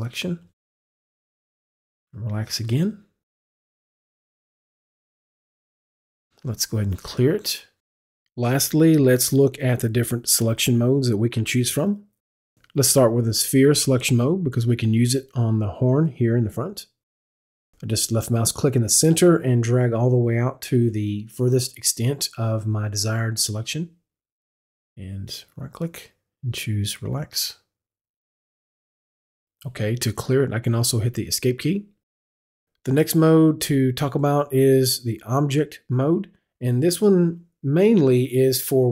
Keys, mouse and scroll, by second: 1.6 click, 8.2 click, 10.4 click, 13.6 click, 16.0-20.1 drag, 25.4 click, 25.6 right click, 27.0 right click, 27.7 click, 28.0 right click, 29.0 right click, 29.0 click, 31.4 click, 31.4 Escape, 34.0 Escape, 34.3 click.